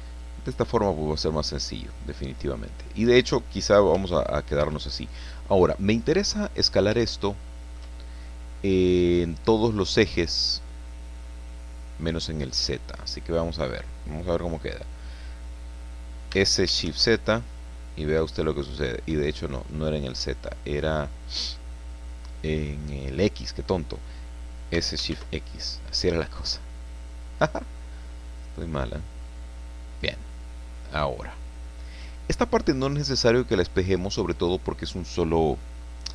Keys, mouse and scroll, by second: 0.2-1.6 drag, 1.7-3.5 middle drag, 3.9 s, 4.6 Escape, 5.2-6.5 drag, 7.0 shift+click, 9.6-13.2 drag, 16.3 s, 17.0 shift+z, 19.1 Escape, 21.5-23.8 drag, 24.7 s, 25.1 shift+x, 30.0 click, 30.9-33.8 drag, 33.9-35.7 middle drag.